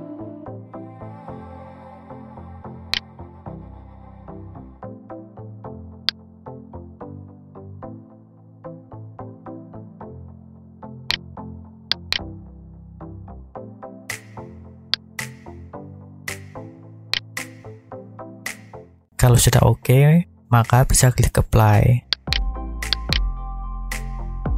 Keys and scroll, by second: 4.3 Tab, 12.7 0, 13.4 Return, 20.1 Tab, 24.3 Tab.